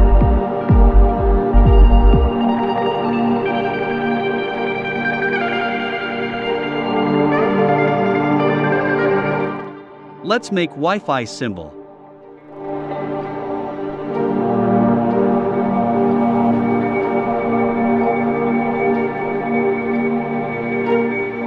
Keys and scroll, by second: 13.3 i.